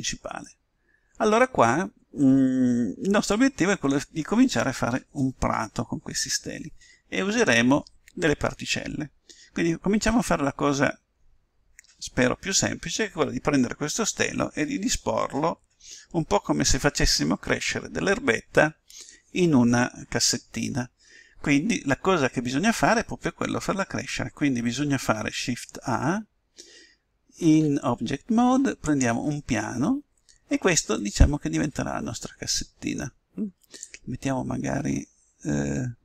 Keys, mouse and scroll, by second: 27.4 shift+a, 30.9-32.9 middle drag, 33.8-35.5 drag.